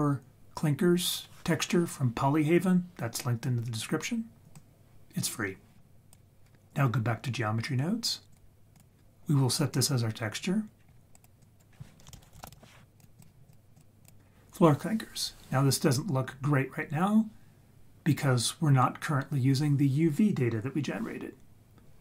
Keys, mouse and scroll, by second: 4.6 click, 8.3-8.8 drag, 10.8-11.2 scroll down 3, 11.2 drag, 11.4 click, 11.7-12.1 scroll up 4, 12.2 shift+a, 13.7-14.1 drag.